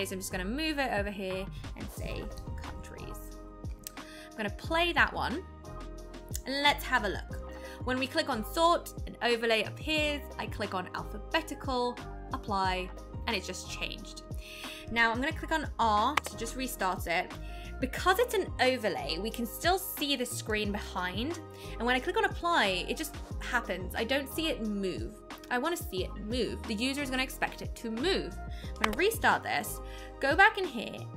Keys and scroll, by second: 16.1 r, 28.8 r.